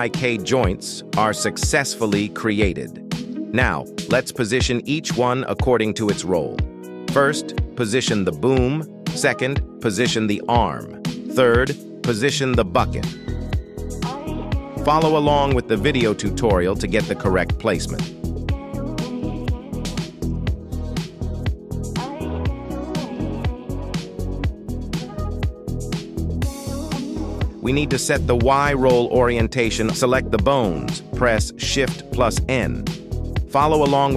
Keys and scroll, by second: 0.5 g, 1.2 Tab, 2.5 shift+s, 3.5 r, 4.2 Escape, 5.1 Tab, 6.7 shift+s, 7.8 Tab, 8.6 r, 9.2 Escape, 10.5 shift+s, 11.3 Tab, 12.7 shift+s, 13.8 Tab, 14.5 r, 15.2 Escape, 15.3 ctrl+z, 17.7 shift+s, 20.5 g, 22.4 z, 23.0 g, 32.1 shift+n.